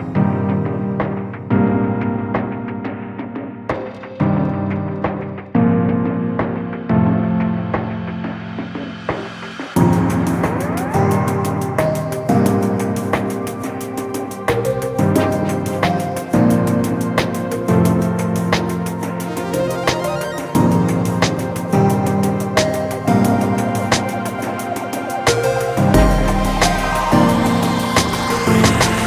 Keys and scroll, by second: 20.5 ctrl+space, 21.0 ctrl+space, 21.2-23.6 ctrl+space, 23.7 ctrl+space, 25.8 ctrl+space.